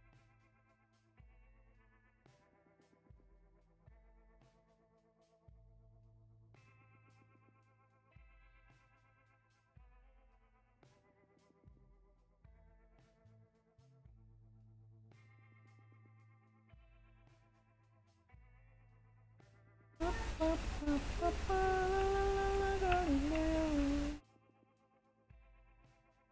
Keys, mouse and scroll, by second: 2.4 scroll down 1, 11.1 scroll up 1, 12.8 scroll up 1, 14.2 scroll down 1, 15.9 scroll up 1, 16.4 scroll down 1, 24.0 scroll up 1.